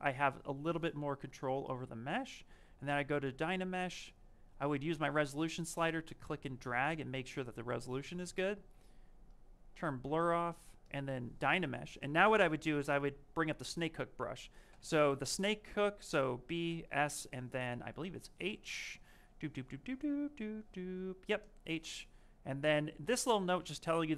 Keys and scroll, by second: 16.5 s.